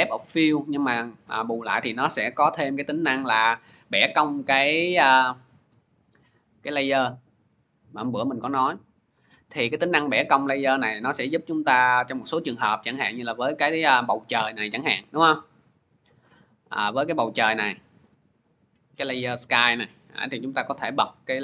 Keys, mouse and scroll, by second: 12.6 scroll, 15.0 click, 15.7 click, 16.7 scroll, 17.9-18.2 scroll.